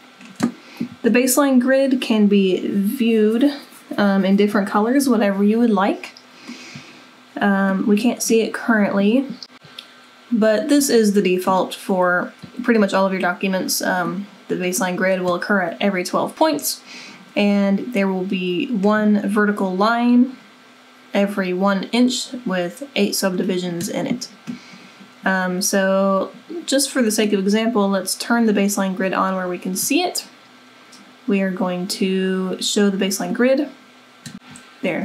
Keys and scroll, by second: 34.3 w.